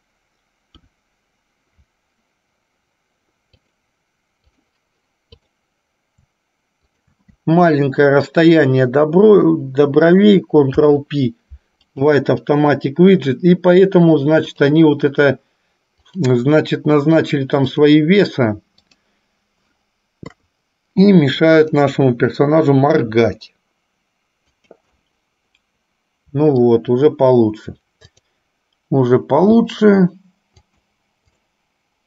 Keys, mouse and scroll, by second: 0.8 KP_1, 3.6-5.0 drag, 5.6 click, 7.1 shift+click, 14.8 click, 16.3 click, 17.9-19.4 drag, 20.6 KP_3, 21.8 click, 23.1 r, 25.3-26.9 middle drag, 28.4 click, 29.8 g, 31.5 click.